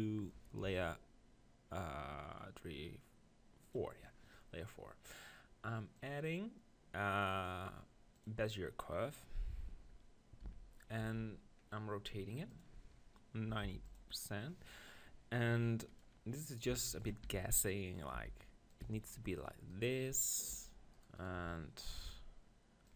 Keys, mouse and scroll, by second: 0.6 m, 6.5-7.9 drag, 10.4 n, 11.0 n, 11.6 middle click, 12.5-14.5 drag, 15.5 Tab, 15.9-17.1 drag, 16.7 g, 17.1 right click, 17.2 r, 17.8-20.1 drag, 18.1 g, 18.9 r, 19.7 right click, 20.6 g, 21.2 middle click, 21.4-22.9 right drag, 21.4 g.